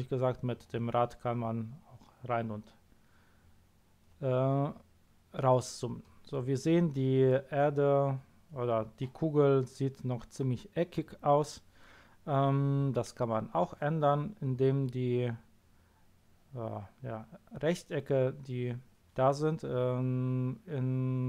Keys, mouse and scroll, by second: 0.4 scroll down 2, 0.6 scroll up 2, 0.8-1.2 scroll down 2, 1.2-1.6 scroll up 2, 1.6 scroll down 2, 2.4-2.8 scroll up 1, 2.8-3.3 scroll down 1, 3.3-3.8 scroll up 1.